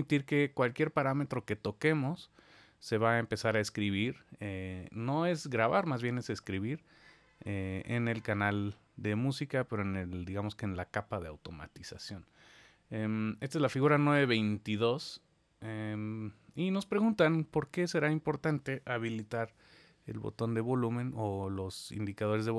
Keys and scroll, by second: 19.0 super+4.